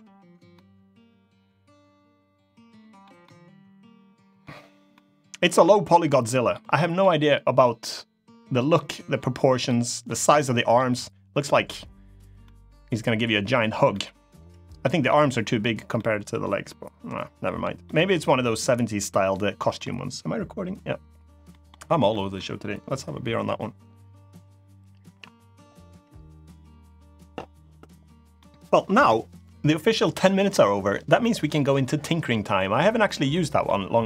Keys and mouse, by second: 0.3-2.8 middle drag, 3.0-4.2 middle drag, 4.7-5.1 middle drag, 5.6-6.3 middle drag, 6.7-8.5 middle drag, 8.6 middle drag, 9.4-9.8 middle drag, 10.0-10.5 middle drag, 12.2-13.5 middle drag, 13.6-14.6 middle drag, 14.8-15.4 middle drag, 15.7-16.0 middle drag, 16.4-17.3 middle drag, 17.6 middle click, 19.3 middle click, 21.2 middle drag, 21.8 middle drag, 28.1-28.5 middle drag, 33.1 middle drag, 33.8 middle click.